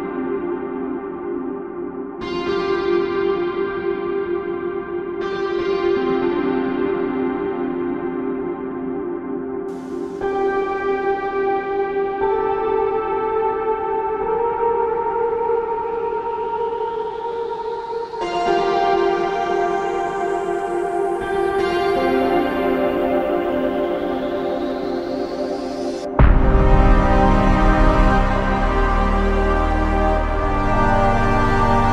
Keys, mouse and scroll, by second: 5.9 double click, 9.9 double click, 10.8 alt+click, 14.4 shift+click, 17.1 double click, 20.8 click, 21.0 alt+click, 25.4 double click, 30.6 alt+click.